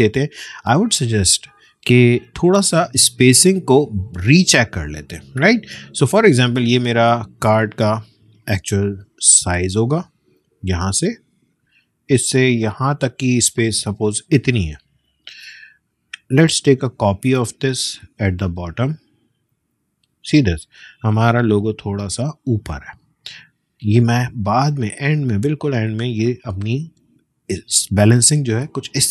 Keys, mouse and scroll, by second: 1.9 click, 8.3 space, 8.4 click, 8.8 space, 11.7-21.0 drag, 21.0 alt+scroll up 1, 23.7 alt+scroll down 1, 23.8-27.2 drag, 27.2 alt+scroll down 1, 27.8 scroll down 1, 28.0 space, 28.2 click, 28.5 space, 28.8 click.